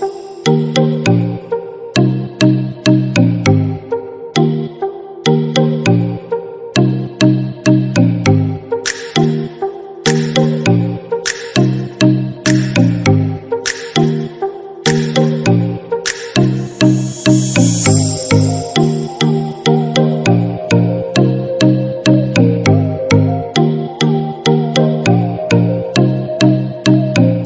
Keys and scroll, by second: 0.4 ctrl+=.